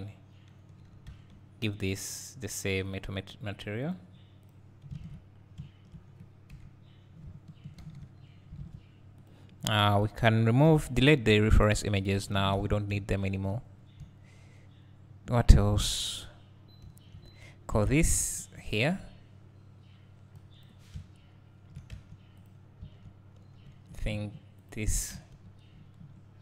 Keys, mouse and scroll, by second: 1.1 Tab, 1.6 Tab, 3.0 click, 5.0 alt+a, 5.3 scroll down 1, 5.6 `, 8.1 alt+h, 8.6 alt+a, 11.5 click, 13.0 `, 13.7-14.0 scroll up 1, 14.0 `, 17.4-17.8 scroll up 2, 17.8 `, 18.9-19.8 scroll up 2, 19.8-20.4 scroll up 1, 20.4-22.5 drag, 22.9 Tab, 23.8 3, 24.7 alt+click, 25.4 ctrl+KP_Add.